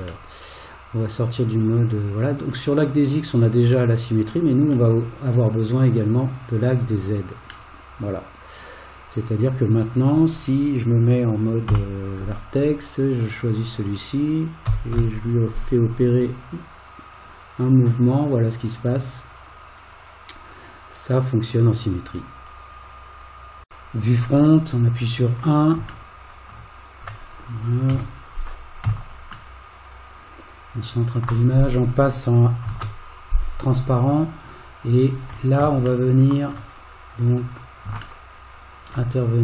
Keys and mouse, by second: 0.3-4.7 middle drag, 6.6 click, 7.7-10.1 middle drag, 11.7 1, 13.4 click, 14.7 g, 26.2-27.4 shift+middle drag, 28.0 KP_1, 29.6-31.3 shift+middle drag, 32.8 alt+z, 36.1 shift+middle click, 38.2 shift+middle click.